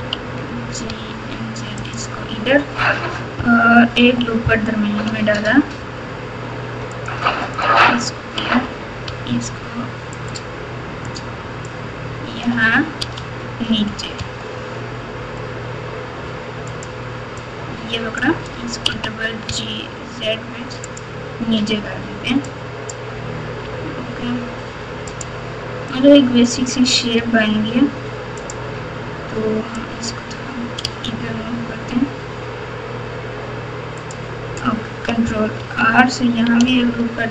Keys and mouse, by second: 1.7-2.1 z, 3.9 ctrl+r, 8.4 g, 11.0 click, 11.3-13.0 drag, 13.0 g, 17.3 click, 17.6 click, 18.9 g, 22.4 click, 22.7 click, 23.6 g, 26.1 click, 27.1 g, 29.9 click, 30.8 g, 35.5 ctrl+r.